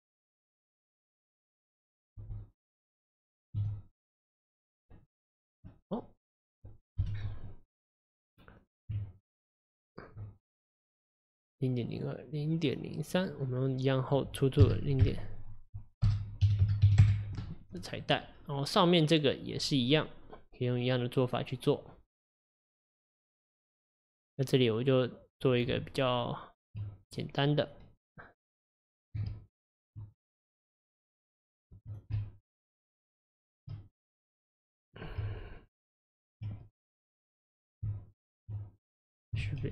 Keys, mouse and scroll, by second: 4.8 middle click, 5.4-5.7 scroll down 3, 5.7-7.0 middle drag, 7.0 KP_1, 7.8 click, 8.3-9.0 scroll up 1, 9.0 Tab, 11.9 click, 13.2 click, 14.1-17.1 drag, 18.1 click, 22.2-25.3 middle drag, 25.8 Tab, 27.1 click, 29.3 shift+a, 31.9 click, 32.2 shift+a, 33.7 shift+a, 33.9 click, 34.6 click, 35.2 Tab, 36.8 click, 37.9 Tab, 39.0 click, 39.5 shift+a.